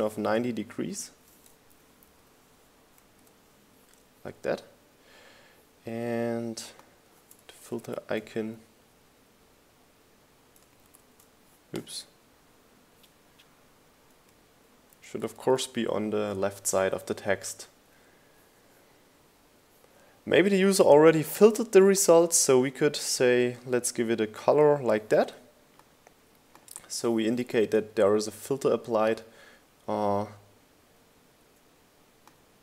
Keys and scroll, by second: 1.8 Left, 3.1 Left, 3.1-4.0 typing, 4.5 Return, 5.5 Return, 10.2 shift+Left, 13.4 shift+Left, 15.9 shift+Left, 18.1 Right, 28.8 Up, 29.8 Down.